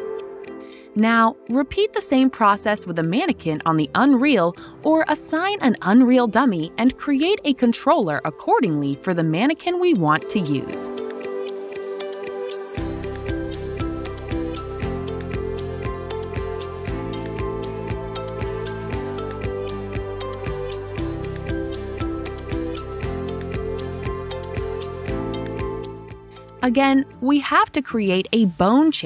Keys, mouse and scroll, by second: 3.5 click, 10.4 click, 11.5 s, 13.5-14.3 typing, 16.3 typing, 17.8-18.5 typing, 22.7 click, 22.7 typing, 23.0 click, 24.6 click, 25.6 click, 26.4 ctrl+click, 28.1 ctrl+click, 28.8 click.